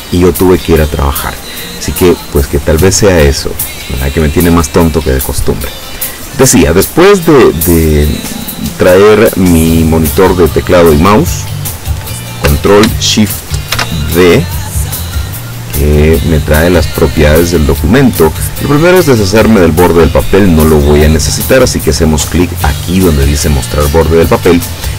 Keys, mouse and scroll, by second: 8.4 click, 13.8 ctrl+shift+d, 15.9 click, 19.9 click.